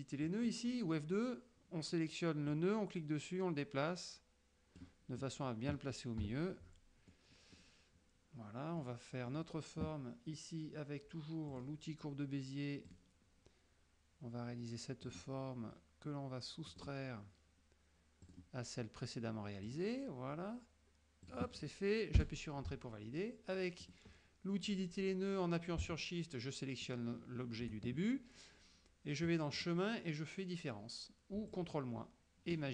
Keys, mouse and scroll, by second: 0.3 click, 2.6-5.1 drag, 6.3 KP_3, 7.2 middle click, 8.9 middle click, 9.4 middle click, 11.6 click, 12.9 click, 15.2 click, 16.8 click, 18.4 click, 19.8 click, 21.4 click, 22.3 Return, 23.9 click, 26.9 shift+click, 29.7 click, 31.6 click.